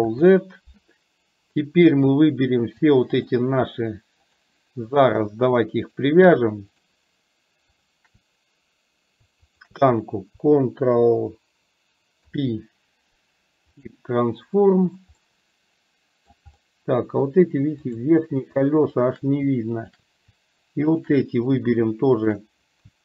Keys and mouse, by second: 0.0 ctrl+z, 2.0 click, 4.4 shift+click, 6.0 shift+click, 6.8 shift+click, 9.6 shift+click, 12.2 ctrl+p, 15.2-16.4 middle drag, 16.6 middle click, 17.9 click, 18.9 shift+click, 19.9 shift+click, 21.0 shift+click.